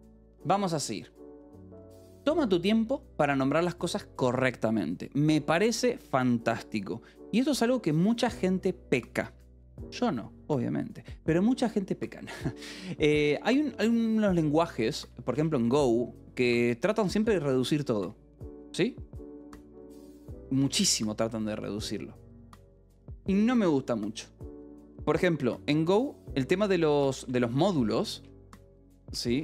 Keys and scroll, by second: 12.1 j, 13.0 a, 13.5 Return, 14.5 BackSpace, 14.9 Return, 15.3 BackSpace, 26.2-29.4 typing.